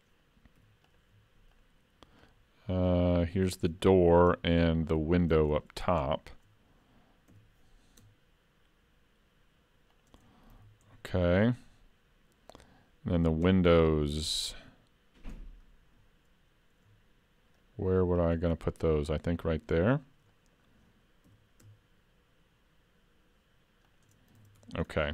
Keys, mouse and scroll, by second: 0.6 3, 0.9 click, 1.8 shift+click, 3.8 middle click, 4.7 shift+click, 5.6 middle click, 6.0 scroll up 1, 6.1 shift+middle click, 7.3 e, 10.6 alt+a, 10.8 Tab, 11.3-12.1 scroll down 2, 11.7 middle click, 13.5 Tab, 14.4 middle click, 17.5 shift+click, 18.7 middle click, 19.4-19.8 scroll up 2, 19.8 shift+middle click, 20.3 middle click, 21.7 e, 24.4 alt+a, 24.6 Tab, 24.8-25.1 scroll down 3.